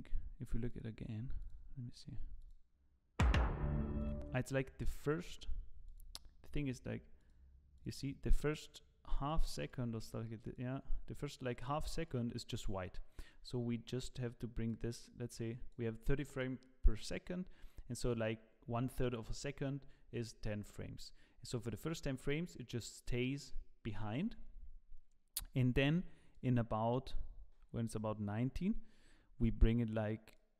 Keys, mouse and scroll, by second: 14.7 click, 21.7 click, 26.3 click, 30.3 click.